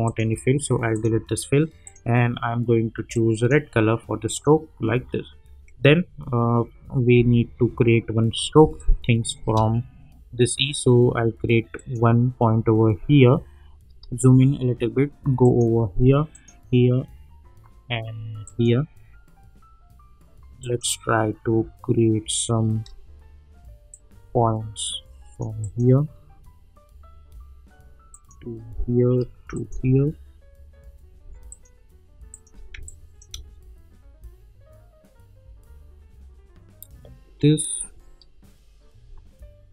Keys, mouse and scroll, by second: 7.3-8.4 alt+scroll up 1, 8.5 space, 8.7 click, 9.0-9.4 space, 11.7 click, 12.4-13.1 scroll down 1, 13.1-14.0 scroll up 1, 15.4 shift+click, 22.8 shift+click, 23.9-25.4 drag, 28.1 click, 29.5 shift+click, 31.5 shift+click, 32.7 space, 32.8-33.4 click, 33.2 space.